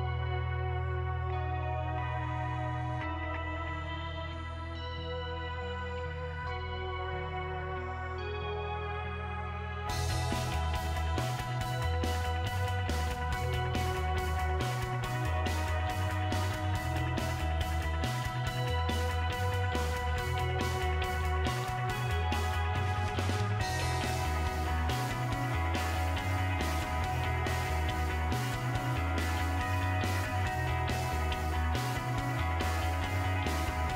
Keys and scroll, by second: 6.5 Delete, 29.1-33.9 typing.